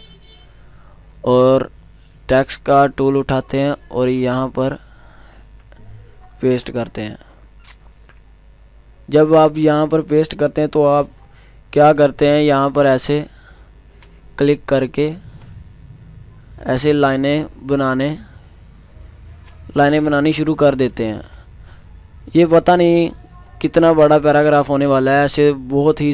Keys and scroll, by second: 7.9 ctrl+v.